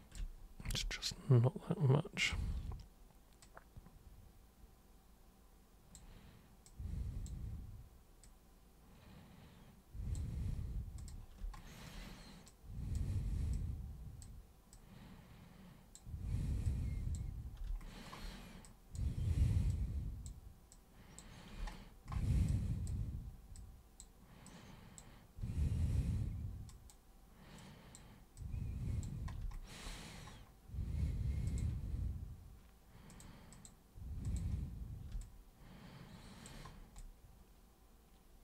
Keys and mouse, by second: 0.7 super+w, 2.2 super+click, 3.4 super+click, 6.6 super+click, 8.2 super+click, 11.0 super+click, 12.5-13.0 super+drag, 13.5 super+click, 14.7-15.9 super+drag, 16.6 super+click, 17.6 super+space, 18.6 super+click, 19.7 super+click, 20.7 super+click, 21.6 super+space, 22.5-22.9 super+drag, 23.5 super+click, 24.5 super+click, 26.7 super+click, 27.6 super+click, 28.4 super+click, 31.5 super+click, 33.1 super+click, 33.5 super+click, 34.2 super+click, 35.2-36.5 alt+super+drag, 37.0-38.4 alt+super+drag.